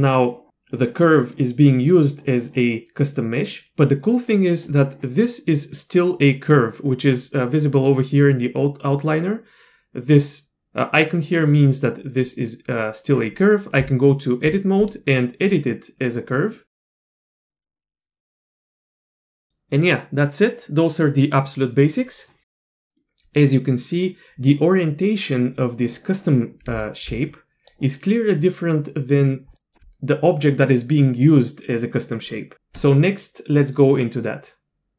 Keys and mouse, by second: 3.4 middle click, 13.4 middle click, 13.8 Tab, 14.8 click, 15.5-16.7 drag, 16.8 middle click, 17.0 click, 17.2 click, 17.8 s, 18.0 click, 18.2 Tab, 26.6 d, 27.0-30.3 d, 27.1-29.5 drag.